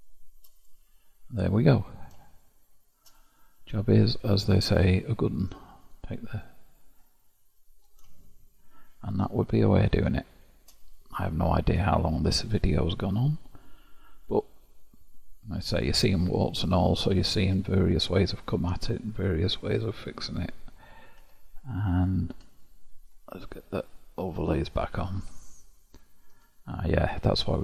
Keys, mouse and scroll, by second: 0.5 click, 1.4-2.4 scroll down 8, 2.4-4.5 shift+middle drag, 4.5-5.7 scroll up 6, 5.7 click, 6.6-8.0 middle drag, 8.0-8.4 shift+scroll down 1, 9.6-14.8 shift+middle drag, 19.5-21.2 scroll up 2, 21.2 Tab, 21.9 click, 22.3 Tab, 23.8 click, 24.5 scroll down 1, 24.7 click, 25.2 Tab, 26.3 Tab.